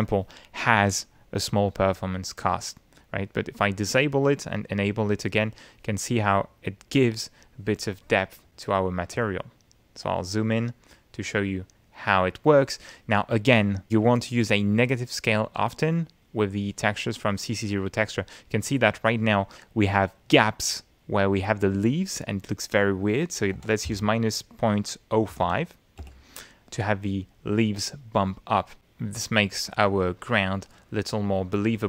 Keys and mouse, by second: 3.8 click, 5.0 click, 6.0 click, 6.4 click, 6.9-8.6 middle drag, 9.1 Tab, 10.1 ctrl+middle click, 11.2-12.7 ctrl+middle drag, 17.6-18.9 middle drag, 22.9 click, 24.4 -, 24.8 ., 25.9-26.8 typing, 26.9 Return, 29.1 middle click, 29.7-30.7 ctrl+middle drag.